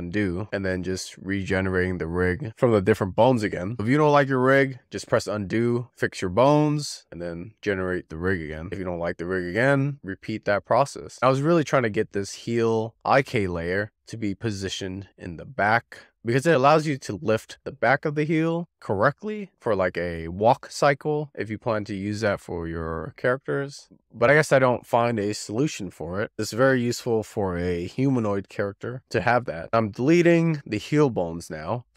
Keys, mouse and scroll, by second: 0.0 scroll down 4, 0.2 shift+middle click, 0.7 click, 1.1-1.4 scroll up 3, 1.8-7.5 drag, 7.8-8.2 z, 8.5 z, 8.7 shift+middle click, 9.1 s, 9.4-10.6 shift+middle drag, 11.1-11.4 scroll up 10, 11.4 click, 11.8 click, 12.0 click, 12.2 click, 12.5 click, 12.8 click, 13.2-14.1 scroll down 8, 13.3 middle click, 13.5 shift+middle click, 14.6 click, 15.3-16.2 scroll down 50, 16.2-18.1 middle drag, 18.1 click, 19.4-29.7 middle drag, 29.9 click, 30.7 middle click, 31.2 x, 31.8 middle click.